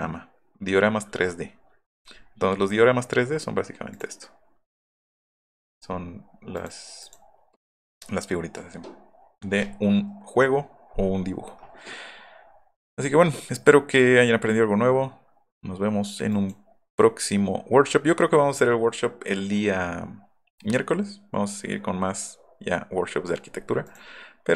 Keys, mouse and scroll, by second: 3.9 click, 5.1 click, 7.0 click.